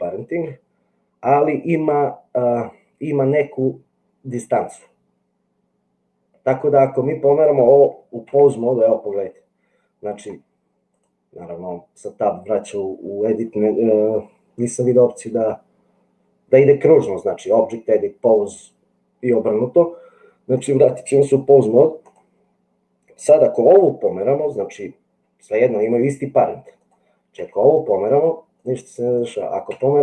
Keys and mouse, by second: 8.8 Tab, 11.2-21.0 drag, 27.6 g, 29.7 g.